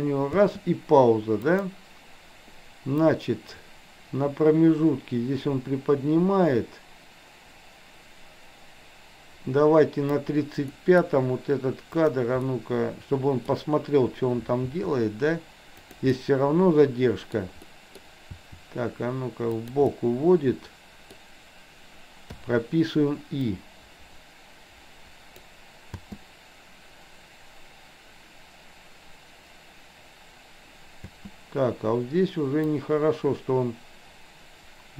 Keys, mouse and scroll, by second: 1.5 click, 1.5 space, 3.1-10.3 drag, 10.8-11.1 middle drag, 12.0 click, 12.4-13.5 middle drag, 14.8 r, 16.1-17.3 middle drag, 17.8 middle click, 18.4 r, 19.9-21.3 middle drag, 22.4 i, 23.6-25.5 drag, 26.0 space, 31.1 space, 32.8-34.9 drag.